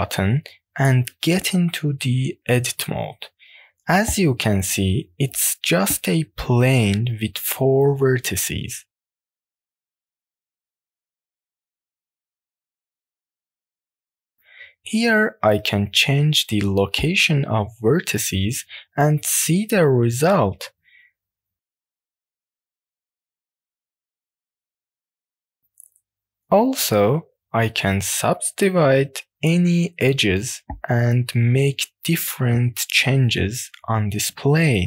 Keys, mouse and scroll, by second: 0.6 middle click, 1.5 middle click, 2.4 a, 3.8 middle click, 5.5 click, 5.8 middle click, 7.0 click, 8.3 click, 9.5 click, 10.2 click, 11.2 scroll down 1, 11.5 middle click, 13.8-15.8 drag, 16.3 scroll up 1, 16.6-17.0 scroll down 1, 17.0 middle click, 17.6 click, 18.0 middle click, 18.9-20.6 drag, 20.9 middle click, 21.4 click, 22.4 click, 23.1 scroll down 2, 23.4 middle click, 24.0 scroll up 1, 24.3 shift+middle click, 24.6 middle click, 25.3 scroll down 1, 25.6 shift+middle click, 25.9 middle click, 26.4 click, 27.2-28.3 drag, 27.2 right click, 28.6 click, 29.0 middle click, 29.3-30.4 drag, 30.8 middle click, 31.6-32.6 drag, 32.8 middle click, 33.7 click, 34.7 middle click.